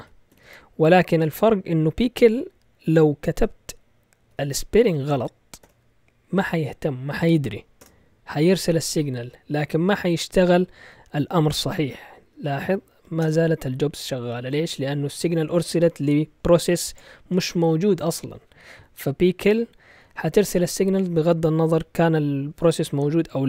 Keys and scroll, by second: 0.0-0.4 typing, 3.3-5.6 typing, 7.8 Return, 12.2 Up, 12.6 Up, 12.9 Down, 13.2 Return, 20.4 typing, 22.2-23.4 typing.